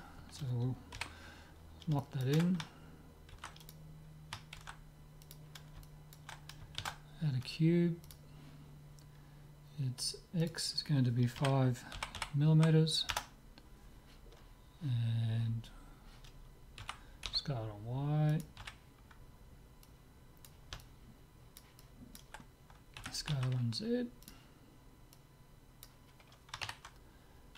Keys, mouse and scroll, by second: 0.9 KP_7, 2.0-4.1 middle drag, 3.4 ctrl+s, 4.6 ctrl+a, 5.9-7.8 middle drag, 6.8 shift+a, 10.4-12.2 drag, 12.2 m, 16.8 s, 18.6 z, 19.9-21.7 drag, 20.8-23.7 middle drag, 23.0 s, 25.2-26.9 drag.